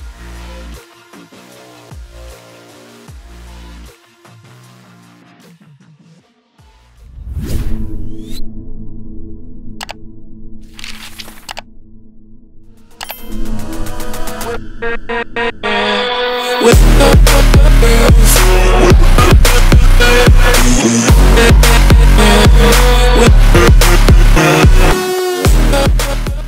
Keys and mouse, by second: 2.9 click, 5.0 click, 5.6 click.